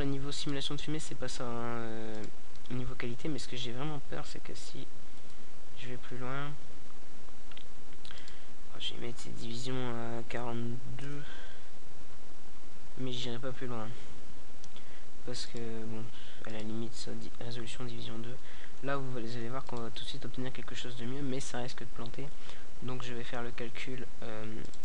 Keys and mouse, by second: 6.8 click, 7.4-24.8 middle drag.